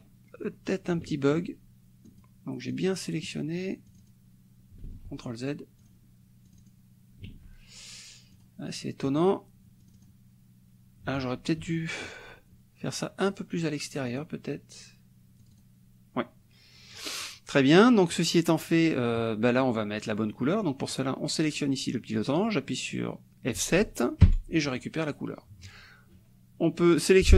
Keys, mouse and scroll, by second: 2.1 click, 2.7 click, 3.9 click, 4.9 ctrl+z, 5.8 click, 6.5 click, 7.3 ctrl+z, 8.4 click, 9.2 click, 9.4 middle click, 9.9 click, 11.2 ctrl+z, 14.1 click, 15.4 click, 20.0 click, 20.4 middle click, 24.2 F7, 24.7 click, 27.0 click.